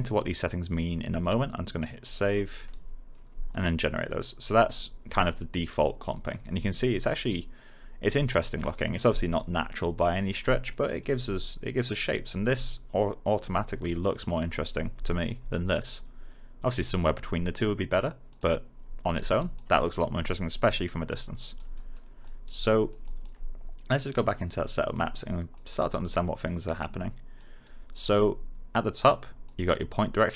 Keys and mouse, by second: 2.0-6.4 drag, 6.6 alt+middle click, 7.0 click, 10.6 alt+middle click, 11.3 alt+click, 18.2 click, 19.8 alt+right click, 20.6 alt+click, 21.7 alt+right click, 22.2 alt+click, 22.6 alt+right click, 23.0 alt+click, 29.4 click.